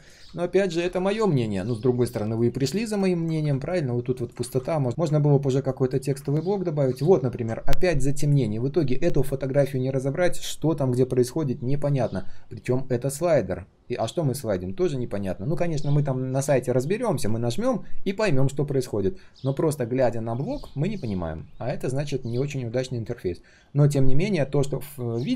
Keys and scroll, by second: 4.4 ctrl+z.